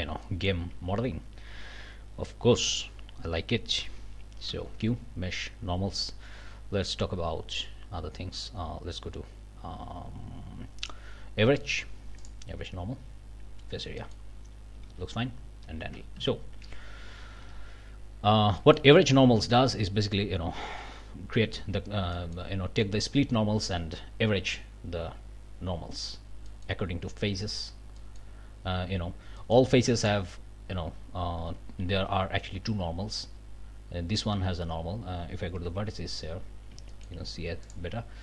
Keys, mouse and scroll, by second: 0.2 middle click, 4.5 q, 12.2 click, 14.0 click, 14.4 scroll up 2, 14.9 alt+a, 16.1 ctrl+alt+Up, 18.1 click, 18.6-19.7 shift+middle drag, 22.1 middle click, 26.5 middle click, 28.0 middle click, 29.4 middle click, 30.0 middle click, 34.8 scroll up 1, 35.6 1, 35.8-36.1 scroll up 2, 36.5 scroll down 3, 36.9 shift+middle click, 37.6 middle click.